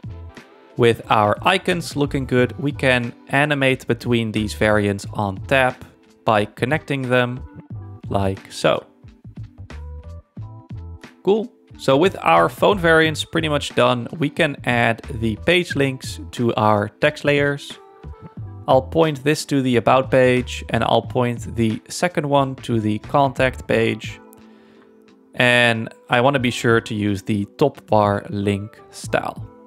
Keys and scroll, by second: 0.3 super+-, 12.2 super+1, 16.2 z.